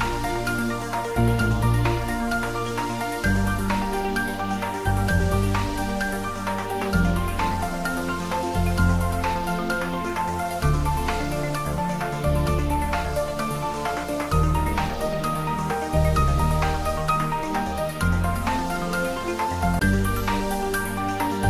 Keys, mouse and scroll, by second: 0.4 click, 3.3-5.5 drag, 5.5-10.9 drag, 10.9-11.3 scroll down 1, 11.3 middle click, 12.5-13.6 scroll up 1, 14.6 click, 16.0 scroll down 1, 16.5 middle click, 17.2 scroll up 1, 18.5-21.4 middle drag.